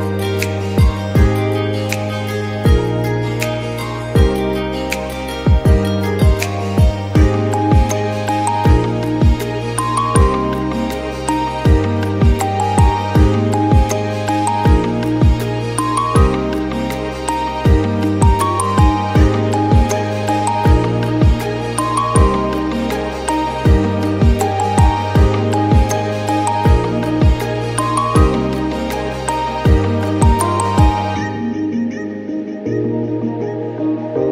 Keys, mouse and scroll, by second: 22.8-23.9 scroll down 1, 23.9-27.2 scroll down 1, 27.2-27.8 scroll down 1, 27.8-28.8 scroll down 1, 28.8-32.3 scroll down 1, 32.3-34.3 scroll down 1.